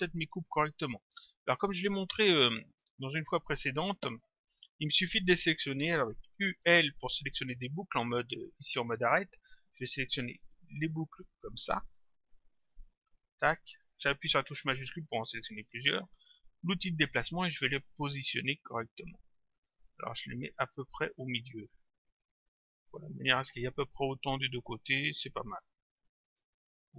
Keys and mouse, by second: 1.6 click, 6.4 u, 10.2 click, 11.2 shift+click, 16.0 click, 18.3 click, 22.1 click, 26.3 click.